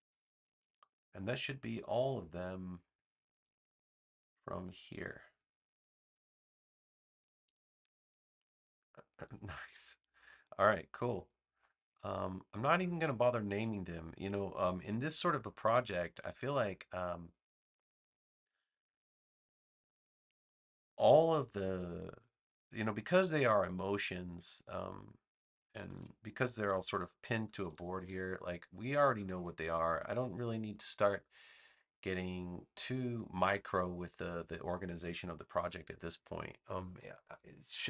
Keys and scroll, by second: 25.8 super+s, 27.1 super+-, 28.9 space.